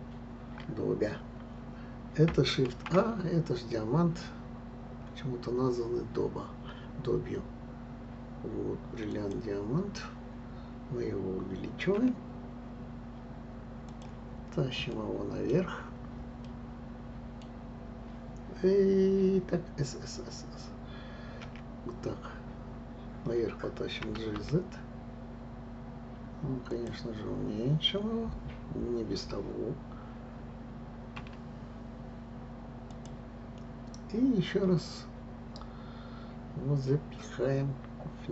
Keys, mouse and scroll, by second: 11.9 s, 14.9-15.9 middle drag, 15.9 scroll, 16.4-19.6 middle drag, 24.0 g, 31.1 s.